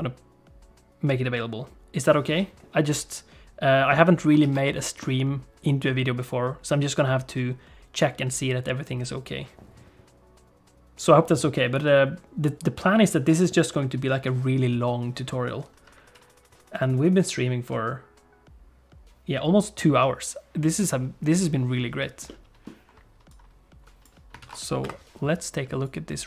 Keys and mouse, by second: 3.8 middle click, 4.4 ctrl+s, 4.8 shift+middle click, 22.2 middle click, 23.3 click, 24.4 ctrl+s, 25.0 F12.